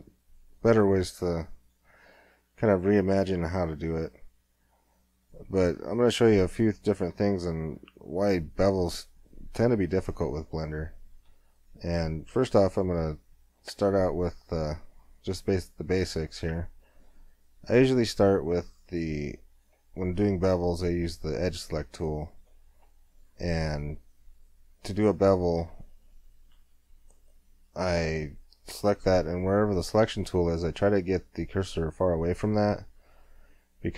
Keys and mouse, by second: 0.0 s, 2.2 middle click, 3.5 s, 8.6 Tab, 12.7-16.4 middle drag, 17.5-19.5 drag, 19.5-21.8 drag, 21.8-25.4 middle drag, 25.4 click, 25.8 middle click.